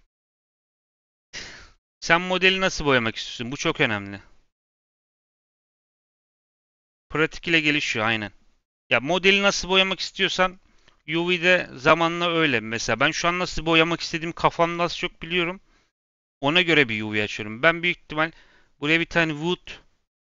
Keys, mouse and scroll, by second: 10.0-11.5 middle drag, 11.5 click, 12.5 scroll up 1, 12.7-15.8 middle drag, 18.0-20.2 scroll down 2.